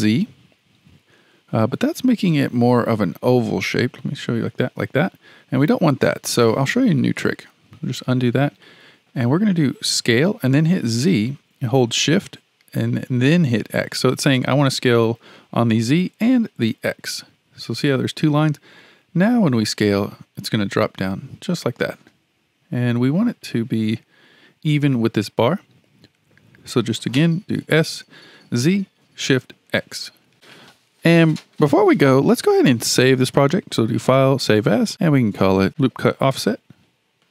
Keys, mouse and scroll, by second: 3.5-6.6 middle drag, 7.9 ctrl+z, 8.6-10.1 middle drag, 10.1 s, 22.5 KP_1, 23.9-27.1 scroll up 2, 27.6 s, 33.3-34.9 drag.